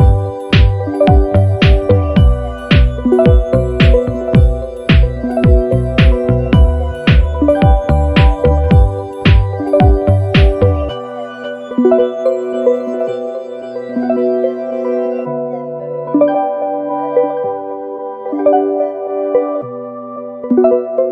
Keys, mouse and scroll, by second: 1.5 click, 2.3 click, 3.3 click, 4.6 Up, 8.5 click, 11.5 click, 12.3 click, 13.3 Down, 14.9 ctrl+click, 15.3-16.5 ctrl+scroll down 4, 16.9 space, 17.8 ctrl+scroll down 2, 18.9 KP_5, 20.4 click.